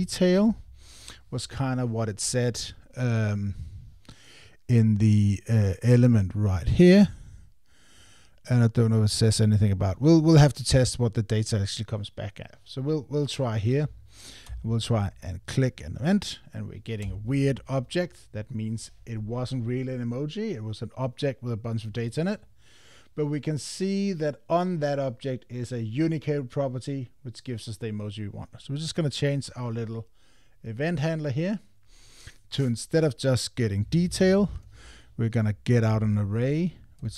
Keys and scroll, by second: 0.5 Tab, 13.8 Escape, 34.5 Return, 35.9 Tab.